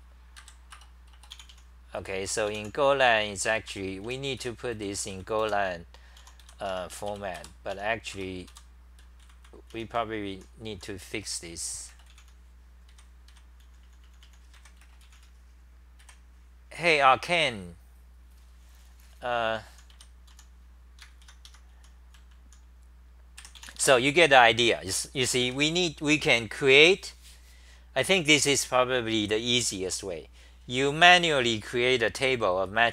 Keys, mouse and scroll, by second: 1.5 Return, 2.0 f, 3.4 Return, 3.7 Return, 4.2-10.7 typing, 8.5 Return, 12.7-15.1 typing, 19.5-20.8 typing, 21.5 Home, 21.9-25.9 typing.